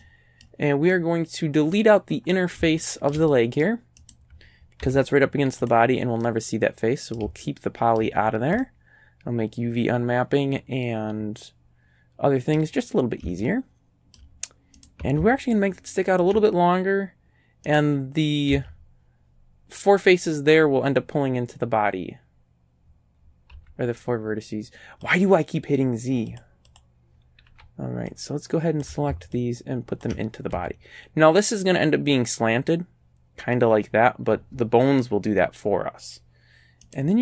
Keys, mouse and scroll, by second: 0.0-2.0 drag, 2.2-2.6 scroll up 1, 2.8-3.8 shift+middle drag, 4.0 shift+right click, 4.8 x, 5.7 click, 6.2-7.4 middle drag, 7.4 shift+middle click, 7.7 shift+click, 8.2-8.5 shift+scroll down 1, 8.6-12.8 drag, 13.4 shift+click, 14.4 shift+right click, 15.6 ctrl+click, 17.7 right click, 18.6 a, 23.6 z, 25.1 click, 26.4 click, 26.7 click, 27.5 b, 28.1 click, 29.4 ctrl+click, 30.6 ctrl+a, 36.9 right click.